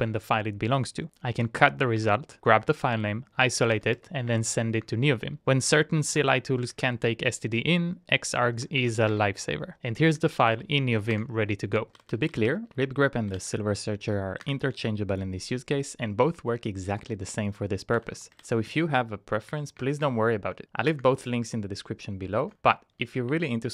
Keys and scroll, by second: 0.0 Return, 0.8-2.0 typing, 4.8-5.7 typing, 5.9 Up, 6.0 Up, 6.1 Up, 6.9 Return, 8.3-11.9 typing, 11.3 Return, 13.1-13.8 typing, 14.6 Return, 17.8-19.1 typing, 19.5 Up, 19.7 Down, 20.0 Up, 20.2 Down, 21.1 Return.